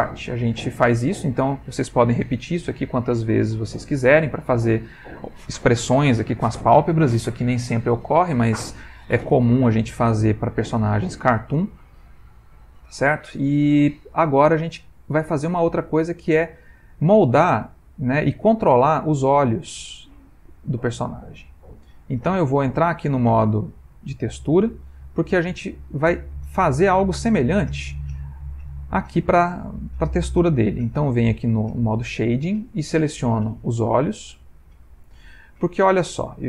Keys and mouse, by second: 0.1 click, 3.1 middle click, 4.4 middle click, 10.1 middle click, 12.2 middle click, 16.9 middle click, 21.5 click, 27.3 middle click.